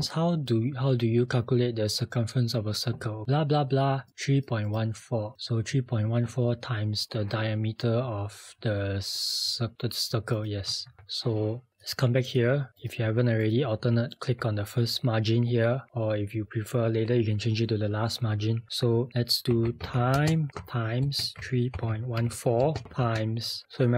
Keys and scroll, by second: 11.0 alt+Tab, 19.3-22.8 typing.